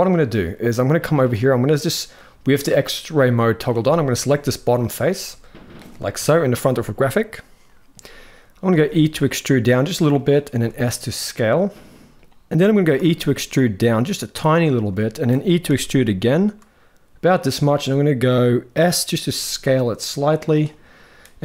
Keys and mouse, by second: 1.0 click, 2.8 click, 3.6 shift+middle click, 4.5 click, 5.0 middle click, 5.9 KP_1, 8.4 e, 10.2 s, 12.7 e, 14.7 shift+middle click, 15.4 e, 18.9 s, 20.6 middle click.